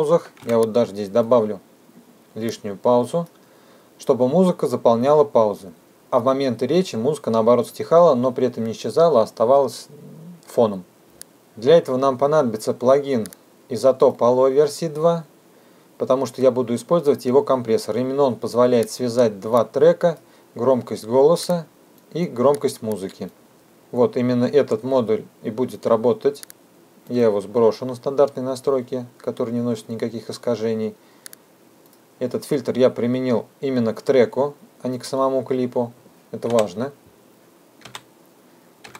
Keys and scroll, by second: 11.2 F2.